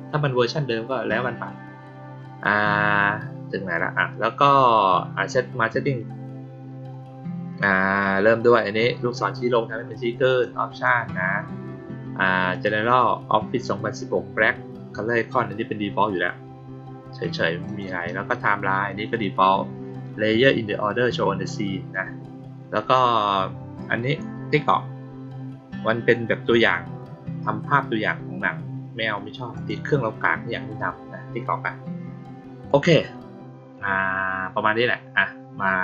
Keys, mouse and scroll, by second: 10.2 click, 12.4 click, 17.6 click, 29.5 click, 32.6 click.